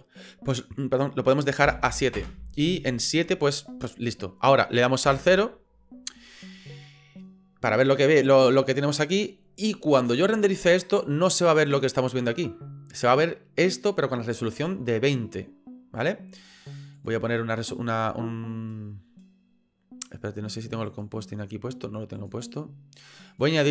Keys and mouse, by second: 5.1 KP_0, 17.0 click, 18.0 click, 22.2 click.